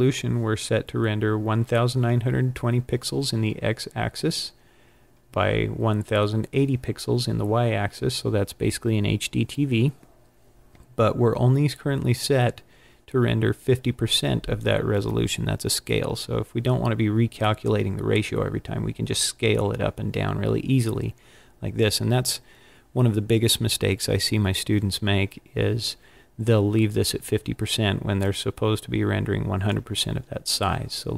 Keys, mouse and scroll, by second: 28.1 click.